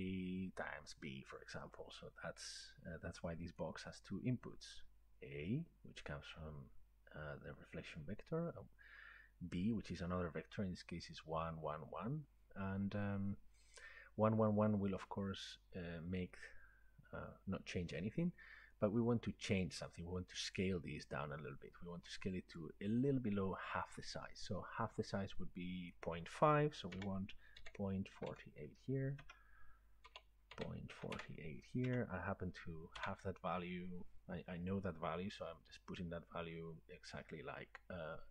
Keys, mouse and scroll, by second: 3.6 click, 15.4-16.6 drag, 19.9 click, 22.6 click, 24.0 click, 25.9 click, 27.0-28.9 typing, 28.9-31.0 drag, 29.2 Tab, 30.9 typing, 32.4-33.0 typing.